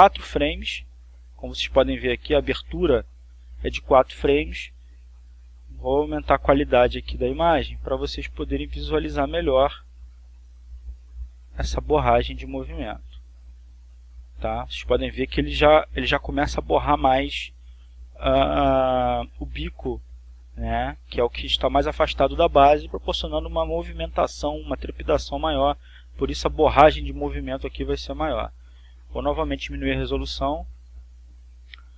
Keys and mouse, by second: 6.0 click, 7.0 click, 9.3-12.2 drag, 12.3 click, 13.3 click, 29.6 click, 30.7-31.8 drag.